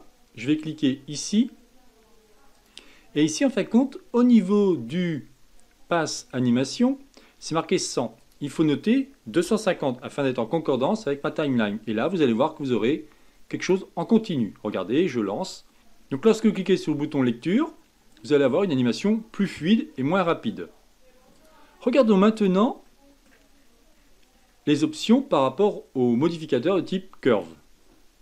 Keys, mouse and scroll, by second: 2.5 click, 6.1-7.7 drag, 8.2-11.2 drag, 13.6-15.8 drag, 16.1-19.1 drag, 21.3-22.8 drag, 22.8 middle click, 23.5-24.7 scroll down 17, 24.7-27.3 middle drag, 27.3 click.